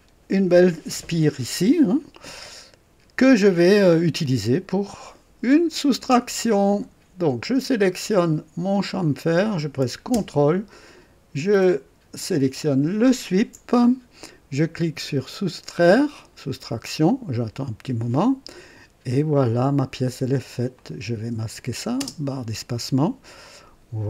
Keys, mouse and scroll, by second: 8.8 click, 13.0 ctrl+click, 16.1 click, 20.7 click, 21.9 space, 23.4 click.